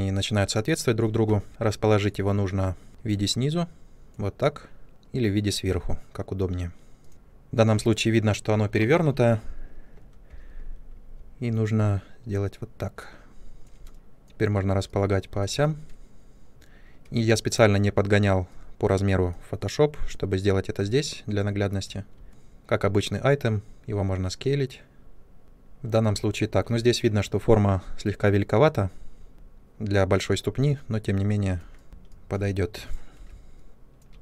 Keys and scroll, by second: 10.2 e, 22.2 r, 31.8 space, 33.0 w.